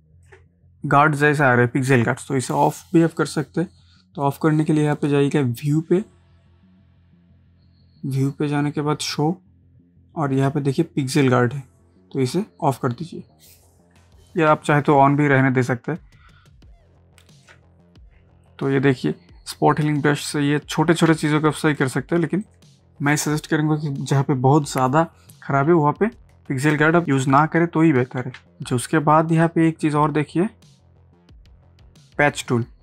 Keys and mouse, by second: 0.1 ctrl+space, 5.5 click, 12.6 click, 14.5 ctrl+space, 14.9 ctrl+click, 15.0 ctrl+space, 20.2 click, 21.1 space, 21.3 click, 21.9 space, 22.4 click, 22.8 ctrl+space, 26.0 click, 26.2 space, 27.0 space, 28.3 space, 29.4-32.8 drag.